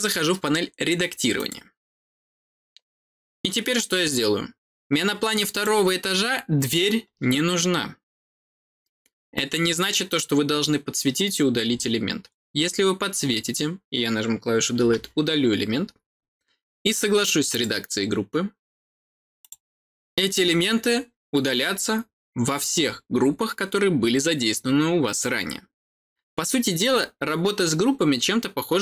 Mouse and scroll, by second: 1.3 click, 4.6-5.4 scroll up 2, 5.4 click, 17.4 click, 19.3 click.